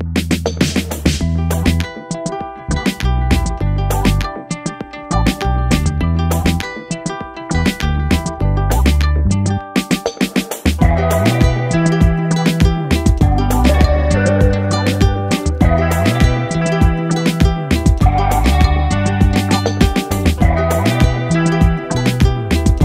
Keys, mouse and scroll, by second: 1.9 click, 5.6 Return, 6.4 click, 6.8 Return, 7.5-8.3 click, 8.7 BackSpace, 12.6-16.4 drag, 12.6-14.7 typing, 16.3-17.0 typing, 17.0-18.2 click, 21.2 ctrl+space, 21.3-21.9 ctrl+click, 21.7 ctrl+space, 21.9 click, 21.9-22.4 click, 22.2-22.8 space.